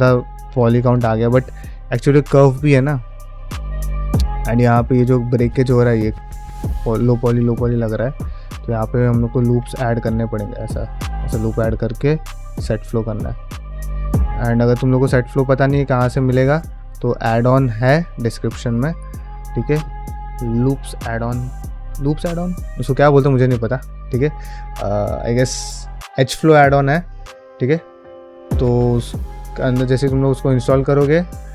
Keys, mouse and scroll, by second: 7.2-8.2 middle drag, 8.4 drag, 9.0 middle drag, 9.4 Tab, 9.9 ctrl+r, 11.2 q, 16.1 ctrl+r, 18.0 middle click, 19.0 ctrl+Tab, 19.5 drag, 19.7-20.4 middle drag, 20.6 ctrl+middle click, 20.8-21.8 middle drag, 27.7 middle click, 28.3 middle click, 29.4 Tab, 29.9 middle click, 30.2 ctrl+middle click.